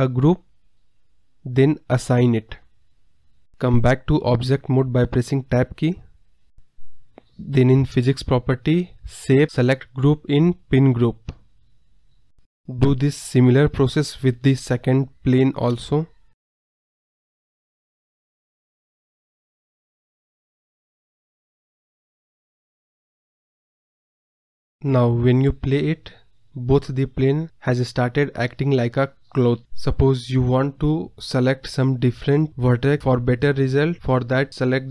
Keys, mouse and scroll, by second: 2.5 Tab, 3.0-3.3 scroll down 10, 3.8 KP_Decimal, 4.3 scroll up 2, 4.4-5.0 scroll down 5, 5.0-5.9 middle drag, 5.9 click, 6.2-9.0 scroll down 37, 9.0-11.5 drag, 11.5-11.8 scroll up 1, 11.8 KP_0, 12.6 click, 12.9 Tab, 13.0-13.6 scroll down 6, 13.3 KP_Decimal, 13.6 middle click, 13.7 scroll up 1, 13.7 middle click, 14.0 drag, 14.3 click, 15.0 shift+click, 15.1 shift+click, 15.4 shift+click, 16.5 shift+click, 16.9-18.2 drag, 18.4 Tab, 18.6 scroll down 8, 18.8 middle drag, 19.1 KP_Decimal, 19.5 click, 20.2-20.9 scroll down 37, 20.9 click, 21.4 KP_0, 21.8 click, 22.1 KP_0, 22.6 scroll up 1, 22.6-23.2 scroll down 7, 23.2 click, 24.3 KP_0, 24.5 scroll up 9, 24.7 scroll down 1, 25.6 space, 34.5 space.